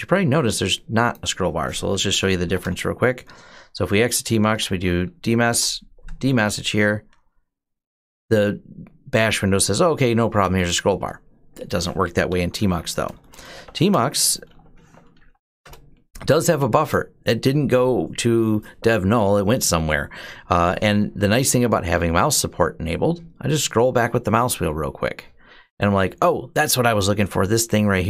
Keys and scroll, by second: 1.7-2.9 typing, 3.9-5.3 typing, 11.9-15.4 typing.